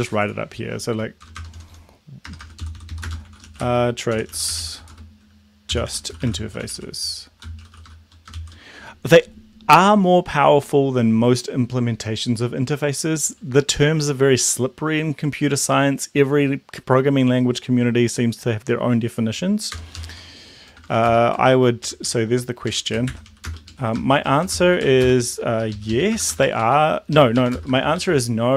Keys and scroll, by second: 1.3 Return, 1.6 Return, 1.7-8.4 typing, 19.9 Return, 20.2-21.4 typing, 21.9 Up, 22.1 Up, 22.8 Down, 22.9-26.4 typing, 25.8 Left, 25.9 Left, 26.6 Right, 27.2 Left, 27.5 Right, 27.6-28.5 typing.